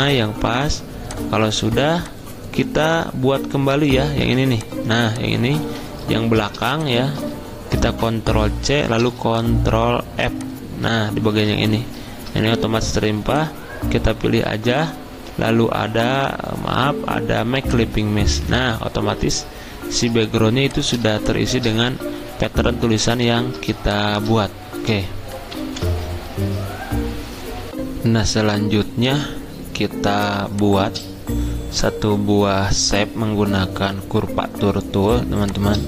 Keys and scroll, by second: 5.6 ctrl+z, 8.7 ctrl+c, 11.3 ctrl+f, 25.5 ctrl+End.